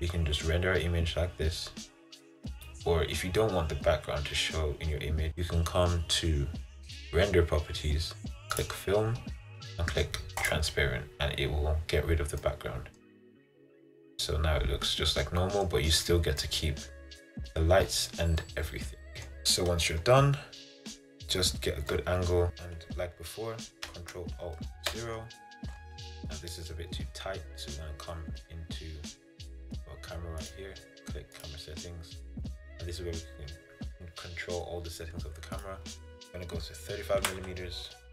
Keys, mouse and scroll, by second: 0.6-1.0 scroll up 2, 1.0-1.8 scroll down 3, 1.8-2.4 scroll up 1, 10.5 click, 12.5 middle click, 13.1-14.2 scroll down 10, 14.2-16.0 middle drag, 16.0-16.6 scroll up 1, 16.6 middle click, 17.5-18.6 scroll up 7, 18.6 middle click, 19.4-21.6 scroll down 2, 21.6-22.0 scroll up 3, 22.0-25.0 middle drag, 25.0 ctrl+alt+KP_0, 30.6 click.